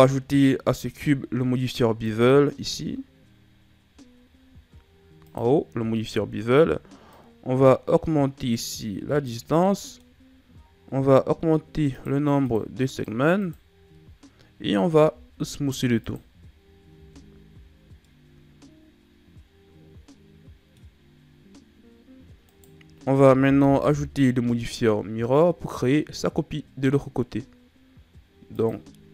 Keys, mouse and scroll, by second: 1.9 click, 7.0 click, 9.5-10.1 middle drag, 10.1-11.4 scroll up 1, 11.8 click, 14.8 w, 16.8 a, 17.1-17.7 scroll down 4, 17.7 scroll down 2, 18.0-20.9 middle drag, 20.9-22.1 scroll up 2, 22.4 right click, 23.6 KP_1, 28.5-29.1 drag.